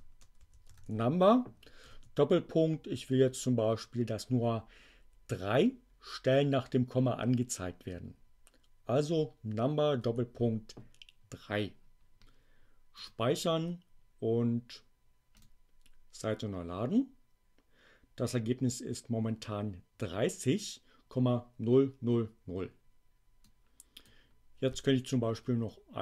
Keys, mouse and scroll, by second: 0.0-0.7 typing, 1.8 shift+., 9.9 3, 13.0 click, 23.4 click, 25.5 BackSpace.